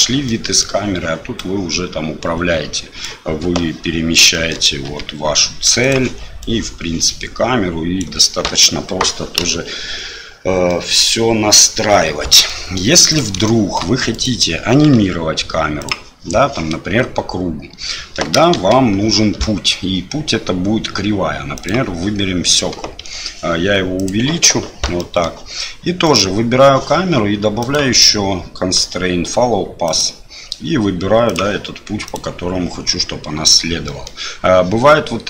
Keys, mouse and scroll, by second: 0.3-0.6 middle drag, 1.4-3.0 right drag, 3.4 KP_7, 4.9 g, 6.4-8.0 right drag, 10.8-11.6 middle drag, 12.6 middle click, 13.1 right click, 13.5-13.8 shift+middle drag, 14.1 right click, 18.5 shift+a, 25.1 middle click, 26.1 right click, 27.6-30.0 drag, 31.3 click, 34.0 middle click.